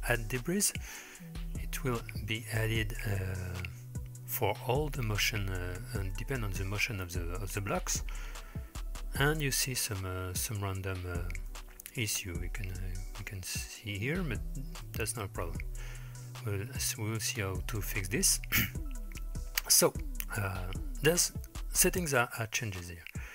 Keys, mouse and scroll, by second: 0.0 space, 6.2-7.1 middle drag, 11.5-12.1 middle drag, 12.6-13.3 middle drag, 14.9 middle click.